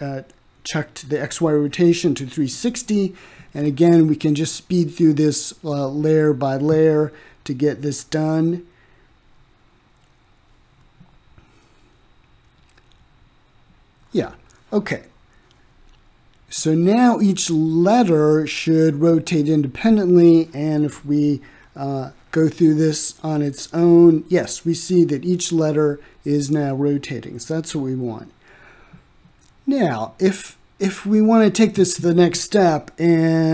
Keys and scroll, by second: 2.4-3.5 typing, 3.9 ctrl+c, 5.4 ctrl+v, 6.5 ctrl+v, 7.6 ctrl+v, 8.6 ctrl+v, 9.4 ctrl+v, 10.2 ctrl+v, 11.1 ctrl+v, 11.9 ctrl+v, 12.7 ctrl+v, 13.4 ctrl+v, 14.2 ctrl+v, 14.9 ctrl+v, 15.6 ctrl+z, 16.3 ctrl+v, 17.7 ctrl+v.